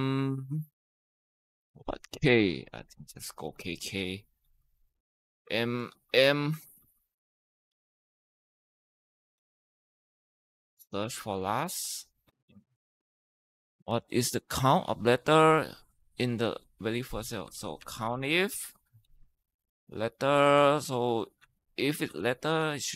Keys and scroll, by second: 2.2-6.6 typing, 7.8 ,, 9.2-11.6 typing, 16.0-18.8 typing, 19.0 Tab, 20.7-22.9 typing.